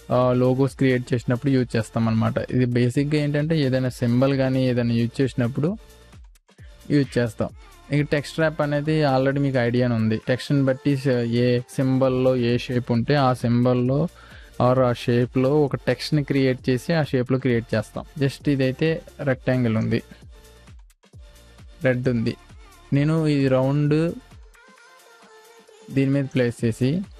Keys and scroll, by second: 0.0 space, 3.8 m, 19.1 v.